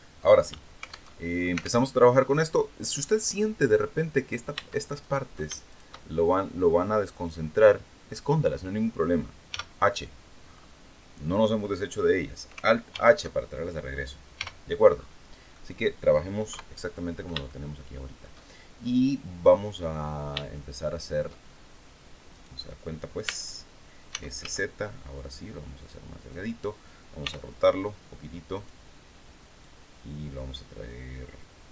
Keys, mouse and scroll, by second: 0.6 alt+Tab, 1.4 alt+Tab, 1.9 middle click, 2.8-3.1 scroll down 2, 3.3 scroll down 2, 4.0 Tab, 4.5 right click, 5.2 shift+right click, 9.0 h, 9.9-10.4 scroll up 2, 10.9-11.3 scroll down 2, 12.4 alt+h, 13.9 h, 14.4 scroll up 2, 15.0 click, 15.3 scroll up 2, 16.0 KP_3, 17.0 shift+middle click, 19.1-19.5 scroll down 2, 19.9 shift+middle click, 21.8 right click, 22.8 Tab, 23.6 s, 23.9 z, 25.8 click, 26.7 r, 28.0 click, 29.1-31.7 drag.